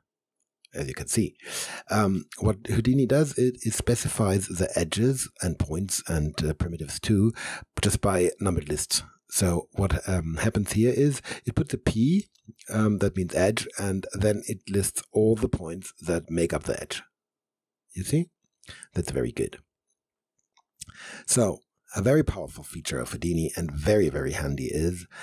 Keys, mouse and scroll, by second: 13.9-20.2 drag, 20.9 click.